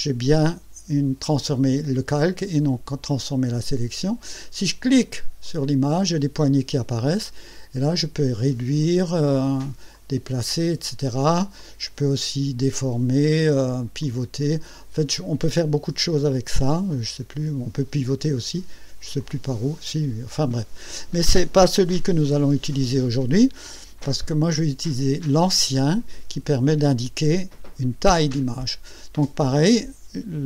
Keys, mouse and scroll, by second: 5.4 click, 7.9 click, 9.9 click, 11.6-13.3 drag, 14.0 click, 16.9 click, 19.2-20.5 drag, 22.2 Escape, 25.8 click.